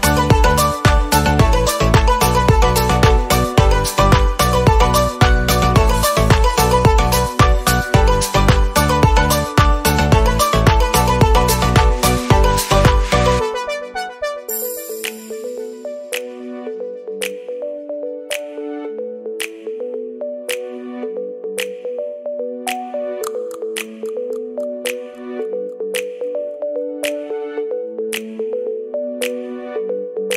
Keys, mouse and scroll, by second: 1.6-3.3 drag, 3.9 click, 4.4 KP_Decimal, 4.9 scroll down 3, 5.2-6.5 middle drag, 6.5-7.6 drag, 7.6-9.3 middle drag, 11.5 click, 13.1-13.8 scroll down 7, 13.7 click, 14.3 KP_Decimal, 15.2 middle click, 15.8 click, 16.0-19.6 middle drag, 19.6 scroll down 2, 19.8 middle click, 20.4-21.1 scroll up 3, 21.1-23.4 shift+middle drag, 24.1-25.8 drag, 25.8 KP_Decimal, 26.5-27.2 scroll down 15, 27.3 middle click, 27.7-28.3 scroll up 3, 28.3-30.3 middle drag.